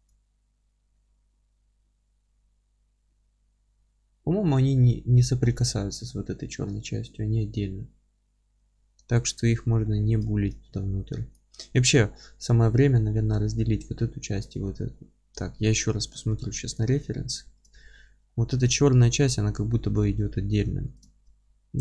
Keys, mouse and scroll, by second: 8.5-11.3 middle drag, 8.8 alt+q, 9.6-10.3 scroll up 2, 10.6 scroll down 1, 11.3 click, 15.1-16.8 middle drag, 15.3-15.9 scroll down 2, 16.8 click, 17.1 alt+q, 17.4-21.0 alt+middle drag, 17.8-18.3 scroll up 2, 20.1 alt+q, 21.0 click, 21.1 alt+q, 21.4-21.8 scroll up 2.